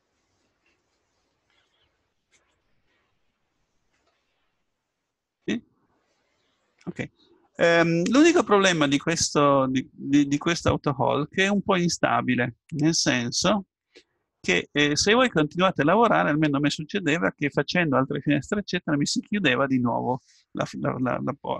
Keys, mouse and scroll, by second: 8.6-11.6 middle drag, 14.0-15.5 middle drag.